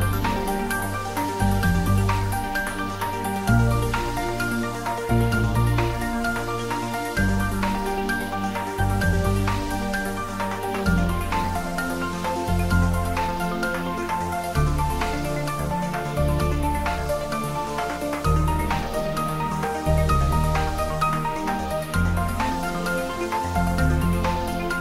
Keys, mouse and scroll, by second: 0.0-2.6 typing, 0.4 click, 0.7 shift+middle click, 3.4 click, 4.0 ctrl+s, 4.2-6.8 shift+middle drag, 6.8 click, 7.3 middle click, 7.8 ctrl+middle click, 8.4 click, 8.6 middle click, 9.3 click, 9.6 middle click, 10.2 click, 10.8 shift+click, 11.1 shift+click, 11.3 middle click, 11.8 g, 12.1 Down, 12.7 Return, 12.9 ctrl+s, 13.2 click, 13.6 shift+click, 14.7 ctrl+j, 15.2 click, 15.6 shift+click, 16.5 ctrl+j, 17.1 middle click, 17.7 ctrl+s, 17.8 middle click, 18.9 shift+click, 19.8 middle click, 20.4 shift+click, 21.0 ctrl+middle click, 21.3-22.5 typing, 22.9 click, 23.4 alt+h.